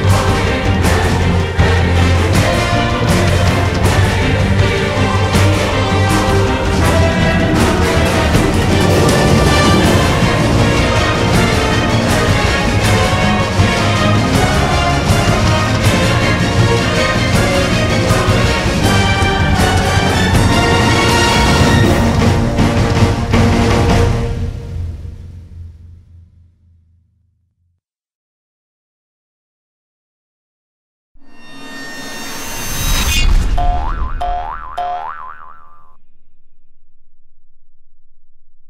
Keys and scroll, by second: 3.0-3.9 typing, 17.1-20.2 typing, 22.3 Delete, 24.0-25.7 typing, 24.5 alt+Tab, 28.5 3.